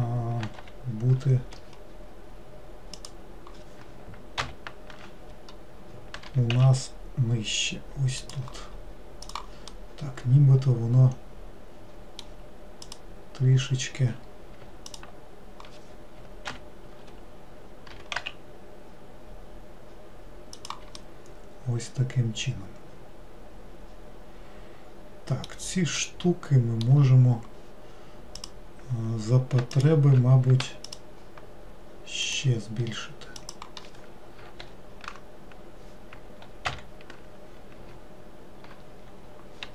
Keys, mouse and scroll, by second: 3.0 click, 9.3 click, 9.8-12.8 middle drag, 12.9 click, 15.0 ctrl+click, 21.0-24.1 middle drag, 26.0-28.4 middle drag, 28.4 click, 29.8 ctrl+click, 30.9 shift+click, 32.3 shift+click, 33.5 shift+click, 34.7 ctrl+l.